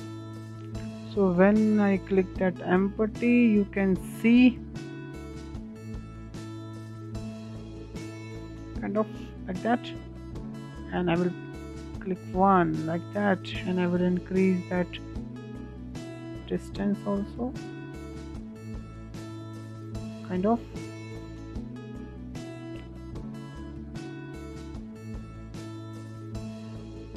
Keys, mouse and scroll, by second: 4.4 click, 6.1 s, 9.2 click, 10.6 click, 11.3 scroll down 3, 11.5-13.2 middle drag, 13.2-16.3 drag, 18.2-19.4 middle drag, 19.4-19.8 scroll up 4, 19.8-20.5 shift+middle drag, 20.5 scroll up 2, 20.8-22.6 shift+middle drag, 22.6 click, 23.8 click, 24.8 s, 26.8 click.